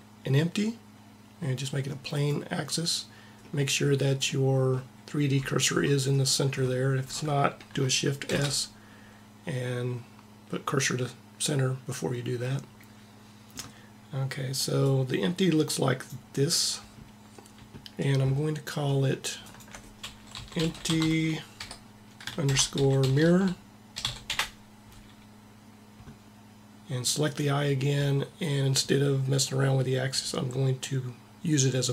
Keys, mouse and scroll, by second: 8.0 shift+s, 14.6-16.4 drag, 19.2-21.0 drag, 23.3 r, 27.0-28.7 drag.